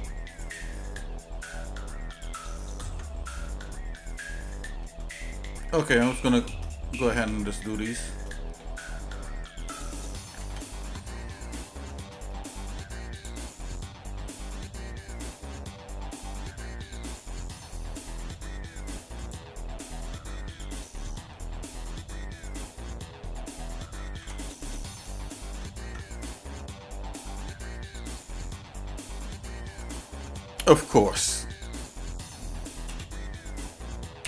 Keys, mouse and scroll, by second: 0.4-2.3 right drag, 2.9 Tab, 3.4 middle click, 4.0 shift+middle click, 4.5 shift+middle click, 5.3 middle click, 6.2 shift+click, 6.7 middle click, 7.6 shift+click, 10.4 alt+c, 11.1 shift+middle click, 12.3 middle click, 13.1 click, 13.5 shift+middle click, 15.3-16.8 shift+middle drag, 17.4 shift+middle click, 19.2 shift+click, 23.9 ctrl+j, 25.3 shift+middle click, 25.8 Tab, 28.2 middle click, 29.2 shift+middle click, 29.9 scroll up 1, 32.8 ;.